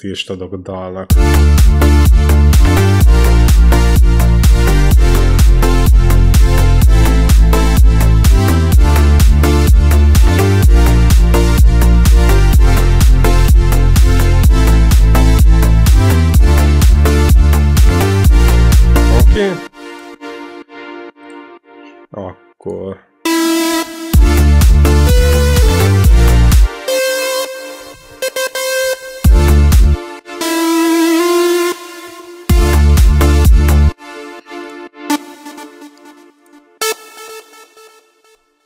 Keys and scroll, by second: 0.9 space, 17.8 space, 23.1 e, 23.9 space, 24.8 u, 25.5 z, 26.5 space, 26.7 i, 29.1 space, 32.3 space, 33.7 space.